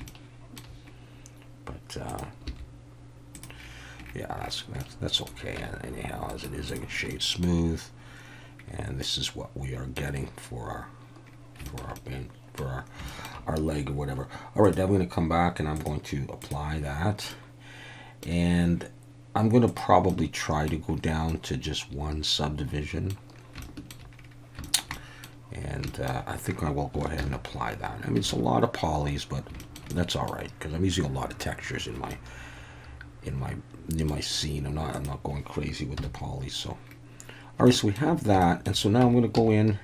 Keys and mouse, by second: 0.1 shift+middle click, 2.5 g, 3.3 click, 4.8 middle click, 5.6 Tab, 7.1-7.4 middle drag, 9.0-10.0 middle drag, 11.7 shift+middle click, 11.9-12.6 middle drag, 13.1 shift+middle click, 17.3-18.2 middle drag, 19.8 click, 20.1-20.7 middle drag, 21.3-23.1 middle drag, 23.6-23.9 shift+middle drag, 24.6 shift+middle drag, 24.9-25.2 middle drag, 25.9 shift+middle drag, 27.2 ctrl+a, 28.3 alt+a, 29.6 shift+middle click, 29.9 middle click, 32.1-34.1 middle drag, 36.0 KP_1, 37.7-38.0 shift+middle drag, 38.4 shift+middle drag, 39.0 Tab, 39.3 a.